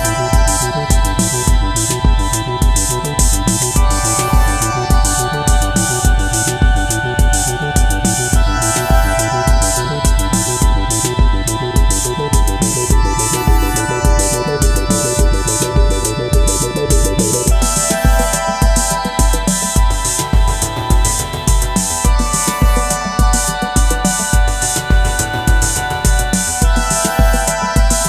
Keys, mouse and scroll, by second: 0.1-2.6 scroll down 1, 9.8 right click, 17.6-18.5 scroll up 1, 18.7 ctrl+click, 27.8 alt+click.